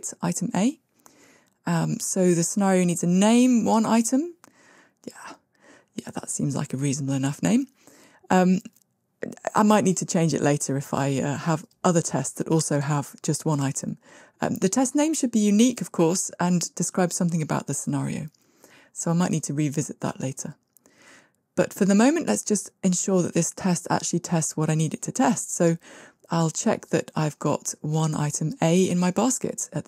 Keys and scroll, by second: 6.0 super+z, 9.2 super+c, 10.3 super+v.